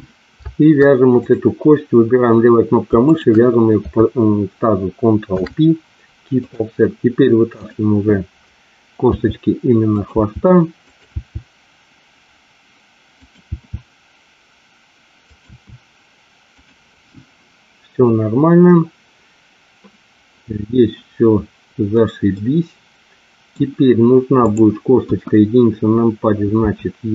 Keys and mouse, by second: 3.0 shift+click, 7.4 click, 9.0 e, 9.8 click, 10.2 e, 10.8 click, 13.0 click, 13.0 e, 13.5 e, 15.2 click, 15.4 e, 22.4-23.5 middle drag, 24.3 click, 25.0 KP_1, 26.5 e.